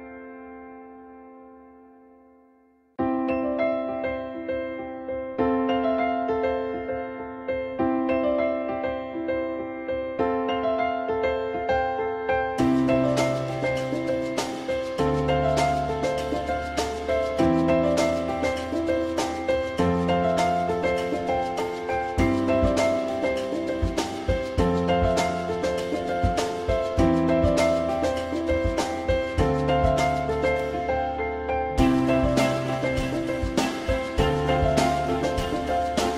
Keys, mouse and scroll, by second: 18.3 shift+click, 21.8 e, 25.2 r, 29.0-30.8 typing.